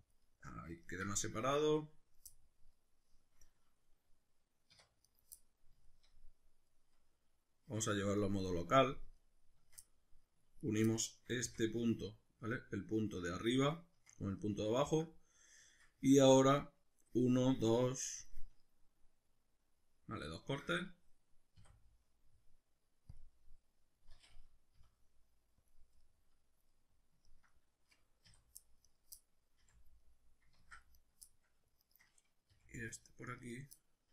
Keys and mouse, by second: 0.1 click, 0.3-5.1 middle drag, 4.7 1, 5.1 right click, 5.4-10.6 middle drag, 7.6 \, 10.6 shift+right click, 10.9-26.5 middle drag, 11.4 f, 21.5 w, 24.8 F9, 26.7-28.9 middle drag, 28.3 2, 28.9 right click, 29.2-31.0 middle drag, 29.6 f, 30.6 ctrl+z, 31.0 right click, 31.3 middle click, 31.8 shift+right click, 32.5 f, 32.9 middle click, 33.4 right click, 33.8-34.1 middle drag.